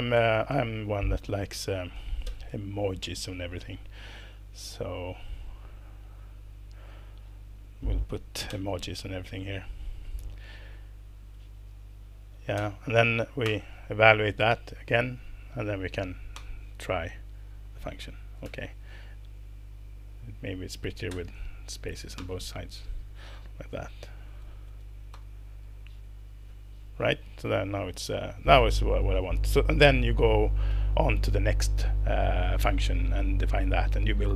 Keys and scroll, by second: 0.2 BackSpace, 0.3 BackSpace, 0.5 BackSpace, 2.3 ctrl+super+space, 8.5 ctrl+super+space, 12.6 space, 13.4 alt+Return, 14.5 Escape, 14.9 Down, 15.1 Down, 15.2 Down, 15.4 Down, 15.6 Down, 15.9 Down, 16.3 alt+Return, 18.4 Escape, 21.1 space, 22.2 alt+Return, 23.7 Down, 23.9 Down, 24.0 Down, 24.2 Down, 24.3 Down, 25.1 alt+Return, 27.9 Escape.